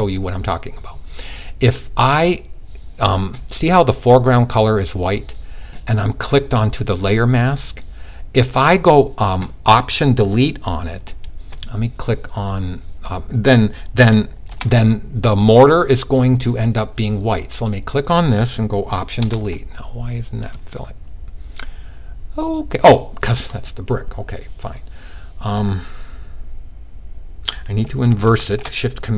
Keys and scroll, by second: 27.8 shift+super+i.